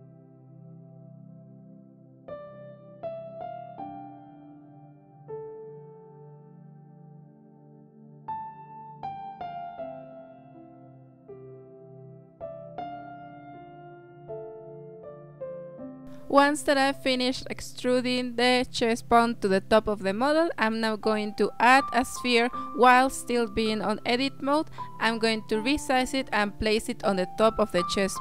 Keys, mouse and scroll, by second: 0.0-1.9 typing, 2.9 e, 3.0 s, 3.6 g, 4.9 e, 7.5 g, 8.2 e, 9.3 s, 9.7 g, 10.3 s, 10.9 shift+middle click, 11.2 e, 12.4 s, 13.4 g, 15.6-16.1 scroll down 4, 16.7 shift+a, 19.4 scroll down 5, 20.0 s, 22.1 scroll up 3, 22.4 g, 23.8 s, 25.0 g, 27.5 s.